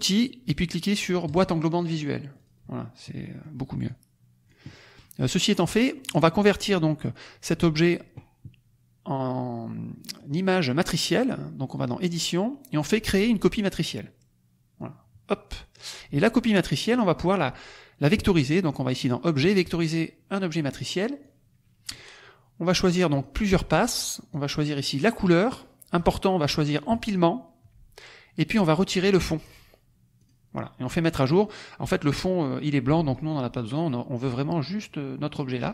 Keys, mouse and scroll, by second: 1.2 click, 2.3 click, 3.2 middle click, 3.2-3.6 scroll up 2, 3.8-4.6 drag, 4.6 middle click, 5.9 middle click, 5.9-6.2 scroll up 2, 10.1-10.6 drag, 11.7 click, 13.7 click, 14.8-15.9 drag, 16.8 click, 19.5 click, 21.2 click, 23.0 click, 24.2 click, 25.0 click, 26.9 click, 29.0 click, 30.1 click.